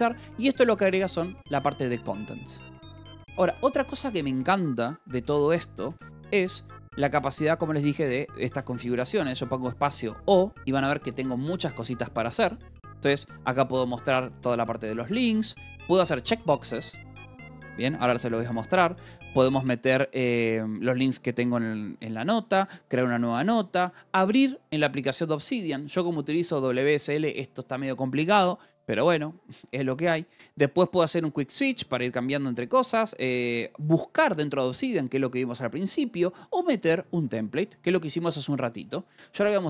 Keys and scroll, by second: 5.7 :, 8.6 space, 9.1 o.